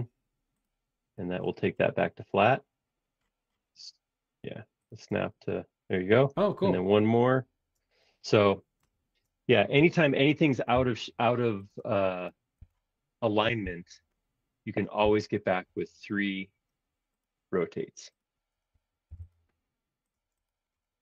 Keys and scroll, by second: 5.1 space, 9.7 m, 10.7 Up, 11.8 space, 12.6 q, 13.6 Left, 15.1 Left, 15.5 Right, 15.8 Left, 19.0 m, 20.1 space.